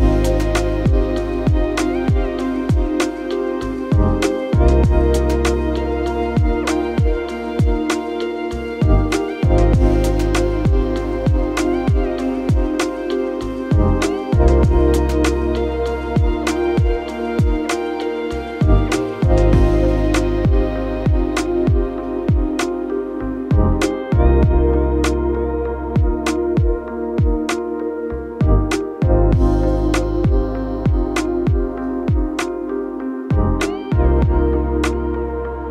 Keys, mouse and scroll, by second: 2.9-4.4 typing, 4.5 Return, 8.9 BackSpace, 9.5 BackSpace, 10.0 5, 10.3 Return, 11.2 BackSpace, 13.1 0, 13.4 Return, 13.6 0, 13.9 Return, 20.7-22.4 typing.